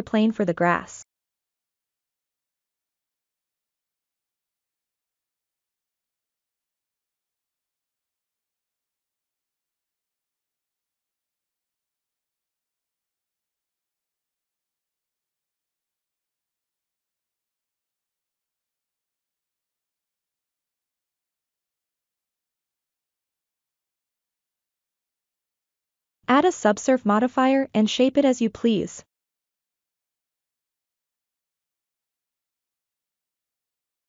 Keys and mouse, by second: 0.2 middle click, 1.7 KP_7, 2.6 shift+a, 5.1-5.7 shift+middle drag, 6.7 Tab, 7.1 s, 7.6-9.5 drag, 10.3 ctrl+r, 13.5 ctrl+middle click, 14.4 1, 14.8 click, 16.1-17.1 drag, 18.5 r, 19.1 click, 20.1 g, 20.5 click, 21.9 click, 22.8 r, 23.5 click, 24.0 g, 24.5 click, 25.4 Tab, 26.4 ctrl+2, 28.2 Tab, 29.8 ctrl+r, 32.3 click, 33.4 s, 33.8-34.0 drag.